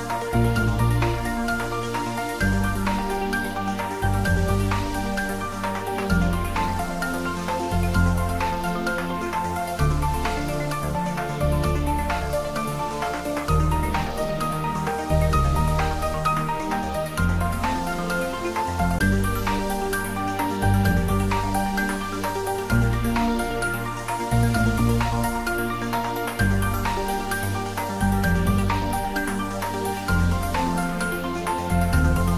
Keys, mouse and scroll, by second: 7.6 click, 7.7-12.7 middle drag, 17.1 click, 18.1 scroll down 1, 19.0 middle click, 20.2-20.5 scroll up 1, 25.0 click.